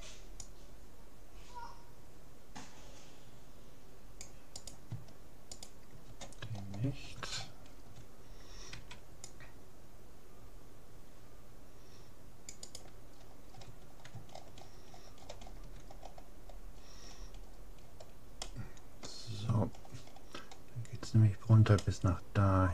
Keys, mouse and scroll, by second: 4.8-7.2 right drag, 6.6-9.6 middle drag, 8.8 c, 13.2-14.6 middle drag, 15.5-15.9 scroll up 1, 15.9-20.1 middle drag, 20.1-21.2 scroll up 1, 21.2-21.8 scroll down 1, 21.8-22.7 middle drag.